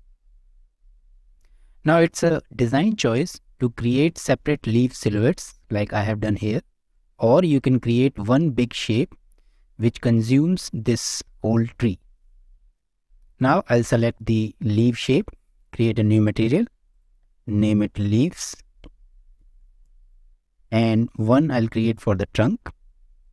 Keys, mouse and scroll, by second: 0.9 shift+middle drag, 1.3 scroll up 1, 1.5-1.9 middle drag, 3.3 shift+middle click, 3.8-4.2 middle drag, 6.4-6.9 middle drag, 7.2 scroll up 1, 7.5 shift+middle drag, 7.9-8.2 middle drag, 12.4 scroll down 1, 12.5 shift+middle click, 13.3 click, 15.6 click, 16.9-19.8 drag, 21.0 click, 21.9 click, 22.3 click, 23.2-23.3 drag.